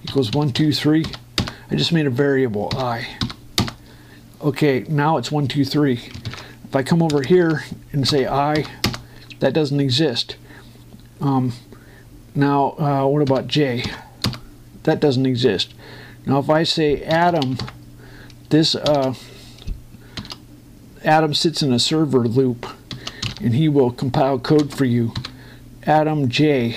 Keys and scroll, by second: 2.1 Return, 4.4 Return, 7.9 Return, 9.6 Return, 14.0 j, 15.0 Return, 17.9 shift+a, 19.6 shift+9, 24.0 4, 25.4 space, 25.9 j.